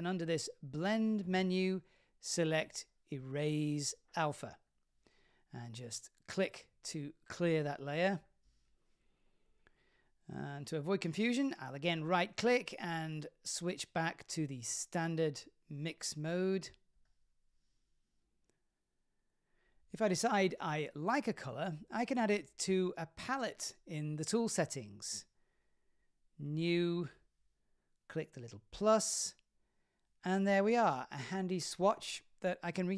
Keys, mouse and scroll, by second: 6.4 click, 9.9 click, 12.2 click, 13.1-17.1 right drag, 18.6 click, 20.9 click.